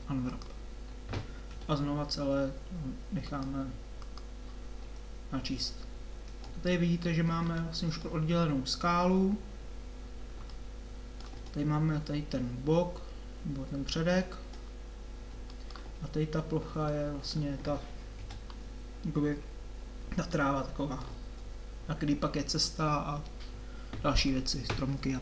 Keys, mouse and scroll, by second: 1.5 a, 1.6 a, 17.0 middle click, 18.2 KP_7, 20.3 middle click.